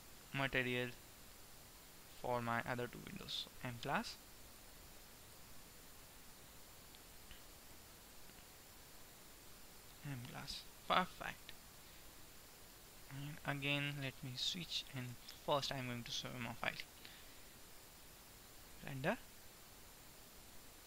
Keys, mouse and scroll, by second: 6.9-8.4 right drag, 10.9-13.4 middle drag, 13.9 click, 15.7 ctrl+s, 17.7-19.0 drag, 19.5-20.8 middle drag.